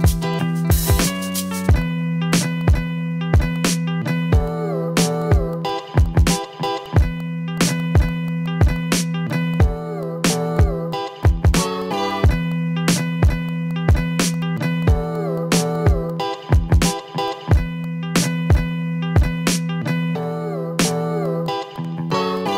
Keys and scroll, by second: 0.0 v, 0.2 ctrl+z, 1.2 ctrl+z, 2.7 ctrl+z, 5.1 ctrl+z, 5.5 ctrl+z, 6.0 ctrl+z, 8.6 ctrl+z, 9.6 ctrl+z, 11.4 ctrl+z, 12.2 ctrl+z, 13.2 ctrl+z, 14.0 ctrl+z, 14.3 a, 15.8 ctrl+z, 17.3 ctrl+z, 21.0 ctrl+z, 21.2 ctrl+z, 22.4 ctrl+z.